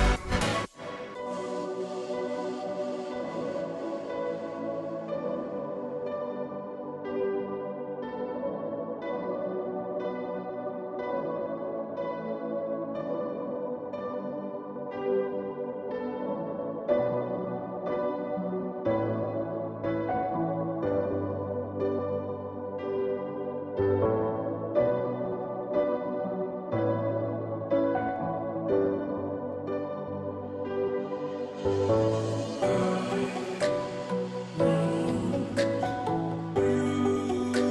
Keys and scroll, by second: 3.6-4.3 typing, 8.9 0, 17.3 ctrl+j, 29.0-30.0 Right, 30.1 Right, 30.5 Right, 30.7 Right, 30.9 Right, 31.3 Right, 31.4 Right, 34.3 Right, 34.3 Left, 34.8 Left.